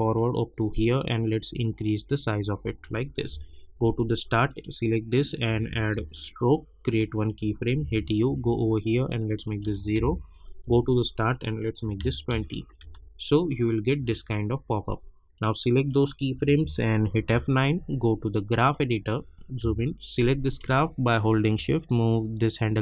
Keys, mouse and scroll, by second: 3.2 j, 4.4 click, 5.4 s, 5.9 t, 6.8 click, 7.8 u, 8.2 k, 9.4 click, 9.9 Return, 10.6 j, 11.3 click, 12.3 Return, 12.8 space, 15.3-17.1 drag, 17.1 F9, 18.6 click, 19.6 =, 20.1-22.8 drag.